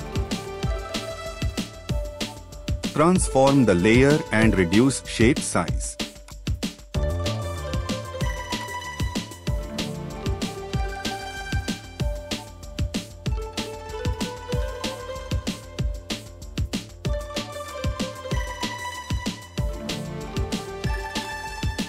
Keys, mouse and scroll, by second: 4.0 ctrl+t, 5.6 ctrl+z.